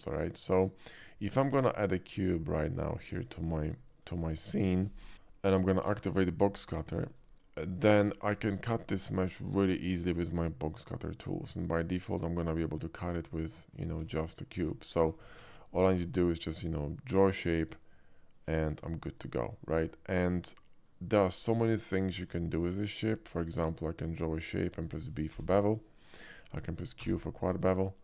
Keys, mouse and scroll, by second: 2.0 click, 2.6-3.0 middle drag, 3.4 shift+middle drag, 3.8 shift+middle click, 5.0 t, 6.0 alt+w, 6.9 shift+middle click, 7.6 shift+middle click, 8.1 shift+middle click, 8.4 shift+middle click, 9.1 shift+middle click, 9.3-11.6 shift+middle drag, 12.3 drag, 12.7-13.3 drag, 13.8 right click, 14.1 ctrl+z, 15.1 ctrl+z, 15.1 ctrl+right click, 15.5 ctrl+z, 16.1-17.5 drag, 18.4 click, 19.1-20.0 middle drag, 21.8-22.3 middle drag, 22.9 shift+middle click, 23.2 shift+middle click, 23.8-24.4 shift+drag, 25.4 b, 27.0 q.